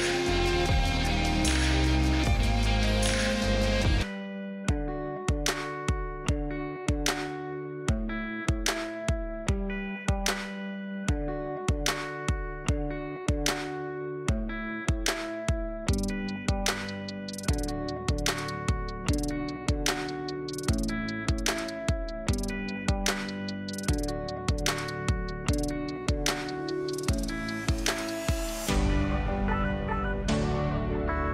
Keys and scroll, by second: 12.3 space, 12.8 space, 20.9 space, 22.8 space, 23.4 space.